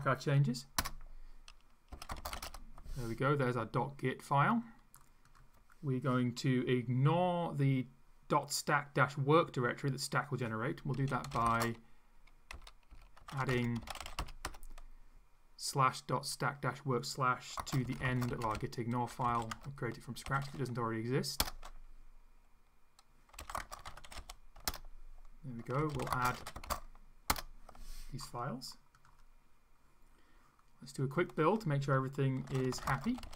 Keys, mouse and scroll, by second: 0.8 Return, 1.7-2.9 typing, 4.5 click, 5.3 click, 10.9-14.9 typing, 17.6-20.9 typing, 21.4 Return, 23.1-27.1 typing, 27.3 Return, 31.0 click, 32.2-33.3 typing.